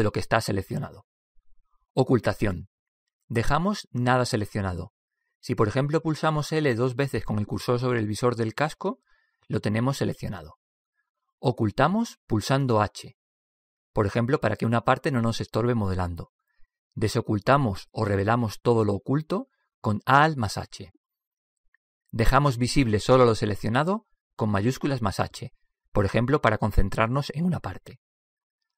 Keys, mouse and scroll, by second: 1.2 ctrl+i, 5.7 a, 9.4 l, 9.9 l, 13.6 h, 21.0 alt+h, 25.6 shift+h.